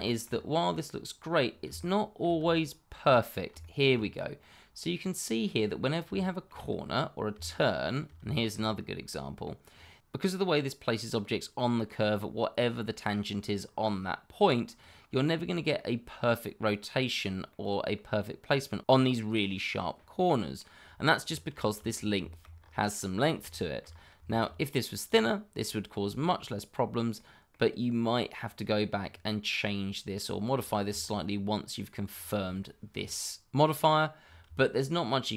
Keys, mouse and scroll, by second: 0.0 shift+middle click, 0.3-0.7 scroll up 1, 0.7 middle click, 1.4 scroll down 1, 1.7 shift+middle click, 2.6 middle click, 3.3-3.6 scroll up 1, 3.6 shift+middle click, 3.9-4.4 shift+scroll up 2, 4.4 middle click, 6.2 shift+middle click, 6.2 middle click, 6.3 shift+middle click, 6.6-7.3 scroll up 1, 7.4 shift+middle click, 7.5 middle click, 7.6 shift+middle click, 8.4 middle click, 8.6-9.0 scroll up 1, 9.0 middle click, 9.6-10.2 scroll down 1, 10.2 middle click, 10.6-12.0 scroll down 2, 12.0 middle click, 12.7-14.4 scroll up 1, 14.8-15.2 scroll down 1, 15.2 middle click, 18.2-18.8 scroll up 1, 20.1 middle click, 20.8-21.2 scroll down 1, 21.9 click, 22.3 shift+middle click, 22.5-23.4 scroll up 1, 23.5 shift+middle click, 23.8-24.2 shift+scroll up 2, 24.2 shift+middle click, 25.0 click, 26.4-27.1 scroll down 1, 27.1 middle click, 28.6-29.0 scroll down 1, 29.0-30.5 scroll up 1, 30.6 shift+middle click, 30.7 middle click, 30.8 shift+middle click, 31.0-32.0 scroll up 1, 32.0-32.4 scroll down 1, 32.5 shift+middle click, 34.2 scroll down 1, 34.6 shift+middle click.